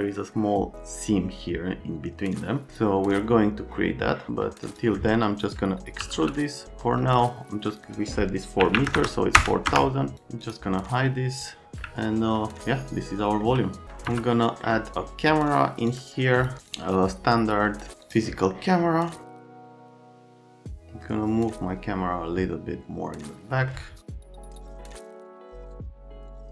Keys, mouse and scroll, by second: 4.6 click, 6.0 w, 7.7 click, 7.9 click, 8.6 KP_4, 8.7 KP_0, 8.9 KP_0, 9.3 KP_0, 9.7 KP_Enter, 10.1 click, 10.4 scroll down 1, 11.4 click, 11.8 alt+middle click, 13.6 middle click, 14.1 F3, 14.4 right click, 14.9 click, 15.9 click, 16.3 click, 16.6 click, 18.0 click, 18.5 right click, 19.1 click, 19.6 c, 19.8 F3, 19.9 click, 20.2 right click, 20.7 click, 24.1 shift+f, 24.5 click, 24.6 click, 24.8 right click, 25.2 click, 25.4 click, 25.8 right click, 26.4 click.